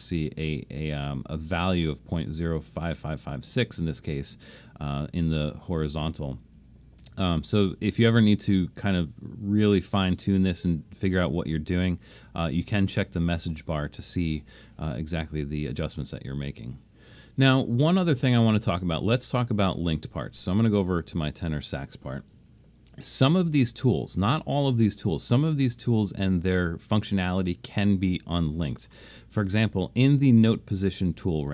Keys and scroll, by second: 7.0 BackSpace, 22.5 super+=, 23.1 super+=, 23.9 super+=.